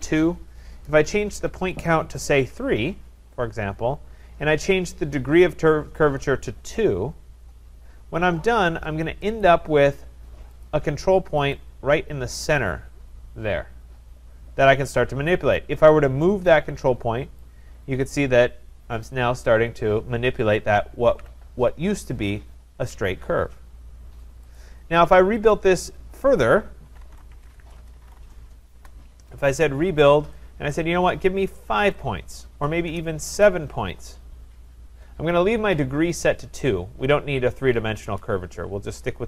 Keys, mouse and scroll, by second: 2.5 3, 9.4 click, 10.7 click, 11.5 click, 12.5 click, 17.4 click, 21.1 ctrl+z, 24.6 click, 25.5 click, 27.1-28.0 typing, 28.8 Return, 30.6 typing, 30.7 click, 31.8 5, 32.9-33.8 typing.